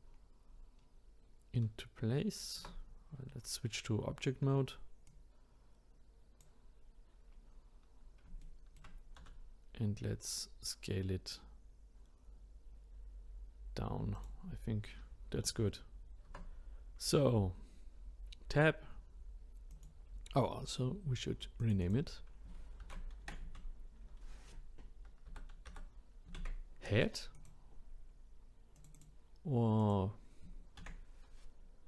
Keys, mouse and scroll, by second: 0.2-0.8 scroll up 3, 0.8-2.6 scroll down 1, 2.6 Tab, 5.1 click, 7.3-7.9 scroll up 1, 7.9-8.4 scroll down 1, 8.4-9.2 shift+middle drag, 9.2 s, 16.2 Tab, 19.7 click, 21.6 click, 21.8-24.9 drag, 28.8 click, 28.9-31.8 drag.